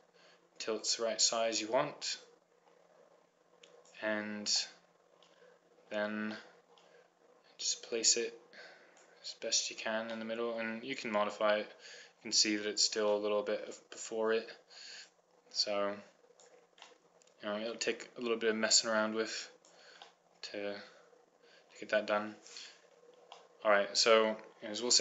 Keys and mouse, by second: 3.1-4.4 drag, 4.8 middle click, 8.4-9.8 drag, 9.8 middle click, 13.0-15.6 middle drag, 15.8-17.1 drag, 17.1 middle click, 19.2-20.8 drag, 22.8 middle click.